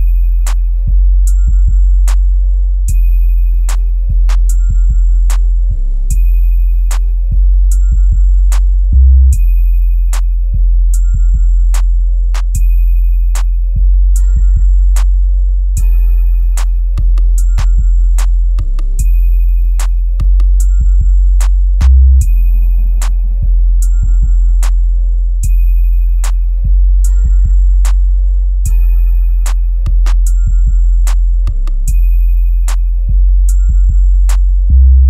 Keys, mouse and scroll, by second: 1.9 click, 5.2 click, 12.3 click, 12.9 right click, 14.9 click, 15.8 scroll down 1, 17.2 click, 19.4-22.4 drag, 22.4 scroll down 1, 23.9-25.4 drag, 25.9-27.2 scroll down 1, 27.2-33.3 drag, 33.3 ctrl+click, 34.1 ctrl+right click.